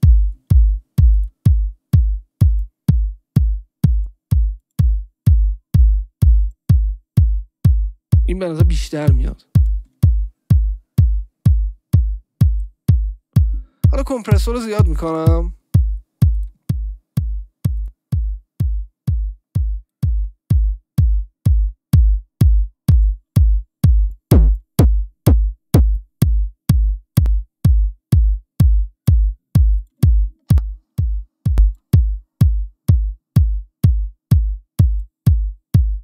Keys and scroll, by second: 30.5 Return.